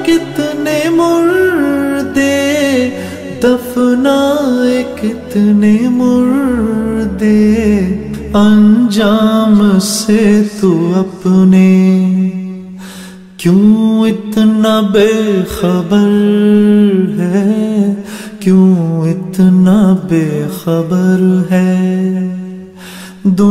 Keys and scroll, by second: 23.0 ctrl+v.